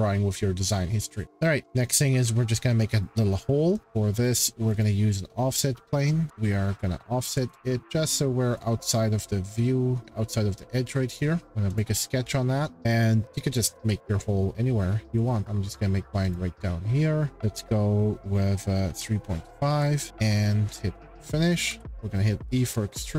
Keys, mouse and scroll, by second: 1.2 scroll, 1.6 click, 3.7 shift+middle click, 3.8-4.8 scroll, 4.8 click, 6.3 click, 6.3 shift+middle click, 7.3 click, 7.8 click, 10.0 click, 11.1 click, 11.4 click, 11.4 shift+middle click, 11.8 click, 12.7-13.7 scroll, 13.7 c, 14.2 scroll down 11, 16.3 click, 18.5-19.7 typing, 20.1-20.5 scroll, 20.7 Escape, 20.7 click, 21.1-21.6 scroll, 21.7 e, 22.7 click.